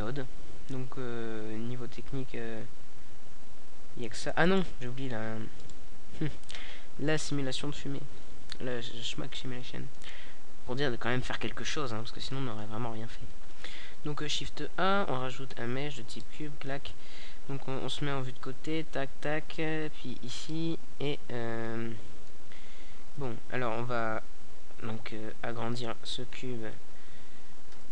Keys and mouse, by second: 0.0-1.9 drag, 1.9 KP_0, 3.3-5.2 middle drag, 5.6 KP_Decimal, 6.6-8.2 middle drag, 8.2 shift+a, 11.8 KP_3, 12.5 KP_5, 17.0 KP_7, 23.2 click, 24.8 KP_3, 26.0 s.